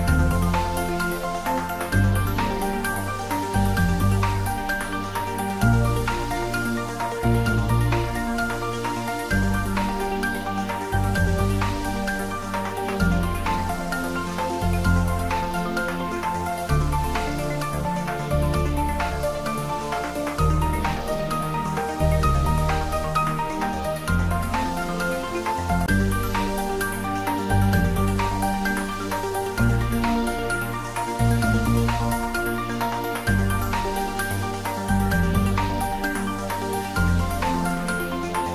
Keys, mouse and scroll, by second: 0.2-4.7 middle drag, 4.7 click, 5.3-5.7 scroll down 1, 6.7 scroll down 1, 9.4 click, 10.9 right click, 13.3 click, 17.7 click, 17.9 ctrl+z, 21.3 ctrl+z, 21.9 ctrl+3, 25.3 scroll down 1, 27.4-31.9 middle drag, 32.5-33.3 scroll up 1, 36.0 scroll up 1, 37.5 ctrl+z.